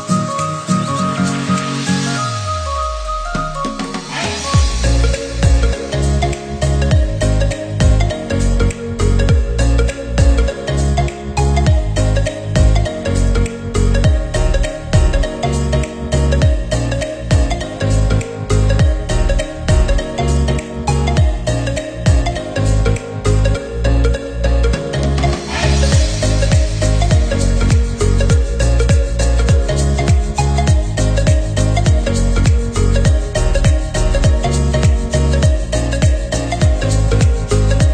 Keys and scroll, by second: 13.4 ctrl+-, 13.9 ctrl+0, 31.4 Down, 32.4 ctrl+=, 34.8 Down.